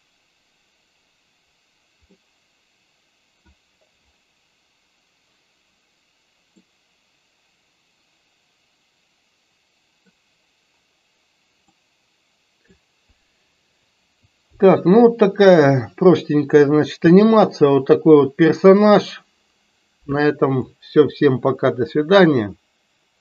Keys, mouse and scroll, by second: 2.2-3.6 middle drag, 6.7-10.2 middle drag, 11.7-12.8 middle drag, 20.7-23.2 middle drag.